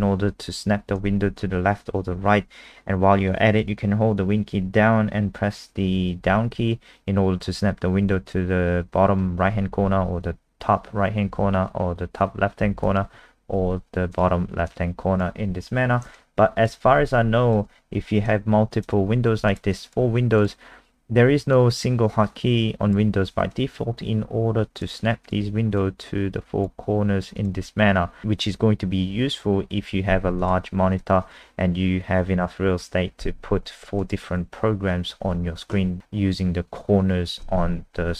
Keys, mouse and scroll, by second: 6.2 super+Down, 9.7 super+Up, 9.9 super+Up, 11.3 super+Left, 12.6 super+Down, 12.8 super+Down, 14.1 click, 16.2 alt+click, 19.7 alt+click, 20.4 click.